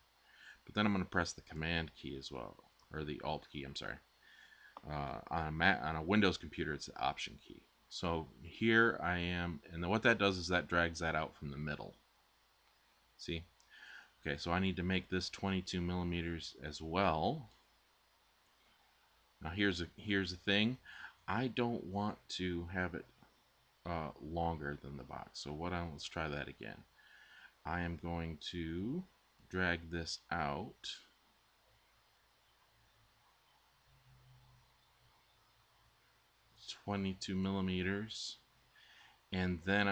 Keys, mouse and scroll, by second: 25.3 Tab, 25.3 z.